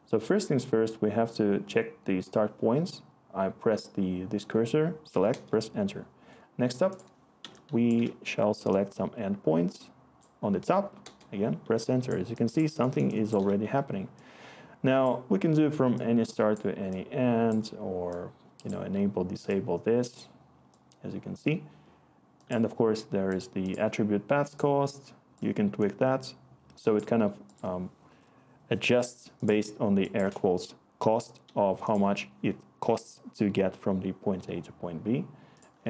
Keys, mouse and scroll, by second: 5.2 Return, 11.0-13.0 Return, 18.4 Return.